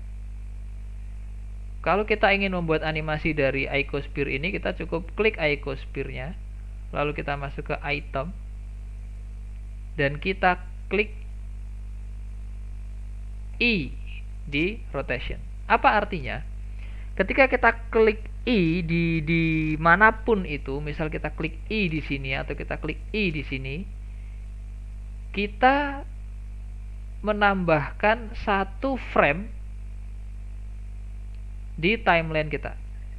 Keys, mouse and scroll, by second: 8.1 click, 13.6 i, 27.7-28.4 scroll down 4, 28.4-30.0 shift+middle drag, 30.0-30.9 scroll up 6, 30.9-32.5 drag, 32.5-32.9 scroll up 2, 32.9 shift+middle click.